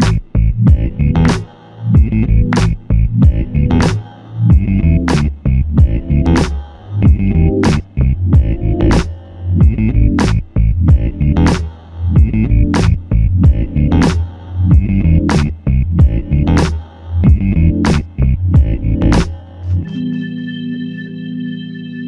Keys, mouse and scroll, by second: 0.9 f, 3.1 double click, 6.3 alt+click, 10.7 double click, 16.2 alt+click, 18.6 click.